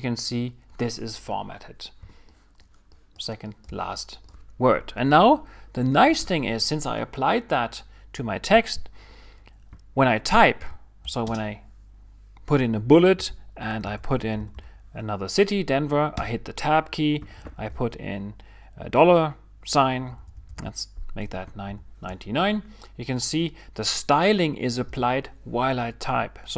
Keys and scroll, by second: 13.6-15.7 typing, 16.2 Tab, 17.3-22.3 typing, 23.7 typing, 24.9 Return.